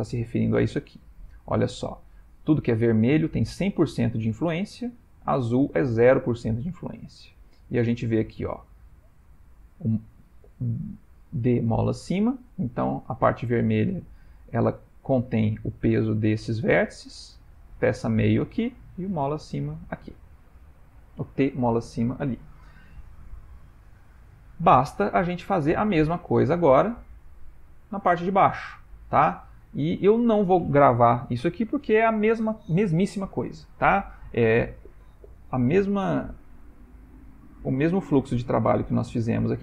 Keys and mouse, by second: 8.6 click, 17.6 click, 19.0 click, 20.3 ctrl+middle click, 21.3 shift+middle click, 23.7 Tab, 24.6 Tab, 26.8 click, 28.7 ctrl+middle click, 29.3 shift+middle click, 35.8 shift+middle click, 36.7 ctrl+middle click, 37.3 middle click, 37.9 shift+middle click, 38.4 ctrl+middle click.